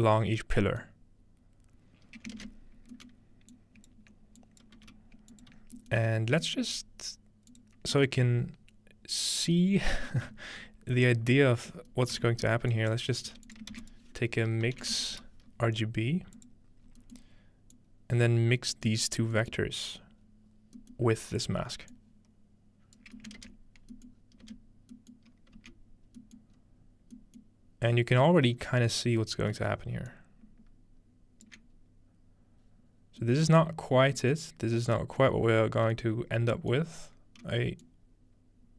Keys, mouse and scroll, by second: 1.9 middle click, 2.0 scroll down 2, 2.7 scroll up 2, 3.0-4.7 middle drag, 3.5-5.6 ctrl+drag, 4.8 g, 5.6-6.7 scroll down 1, 6.0-7.3 middle drag, 6.7 scroll up 1, 7.5 click, 9.9 scroll up 1, 10.8 scroll up 1, 11.5-12.5 scroll up 1, 12.2 m, 12.7-15.5 drag, 13.3-15.4 typing, 16.4-18.8 drag, 16.9-17.8 scroll up 1, 17.8-18.3 scroll up 1, 18.8 scroll up 1, 19.1-20.5 scroll down 1, 20.6 middle click, 20.6-21.1 scroll down 1, 21.0-23.0 middle drag, 21.9-23.5 drag, 23.4 ctrl+space, 23.4 middle click, 24.2-24.8 scroll down 1, 26.6-27.2 middle drag, 26.6-28.2 scroll up 2, 27.5-28.0 middle drag, 28.2-30.1 middle drag, 28.6-30.8 scroll up 2, 30.1-32.6 shift+drag, 33.5-35.0 middle drag, 35.3-35.8 middle drag, 35.3-36.3 scroll up 2, 36.3 middle click, 36.3-36.9 scroll down 2, 36.8 middle drag, 37.8-38.7 drag.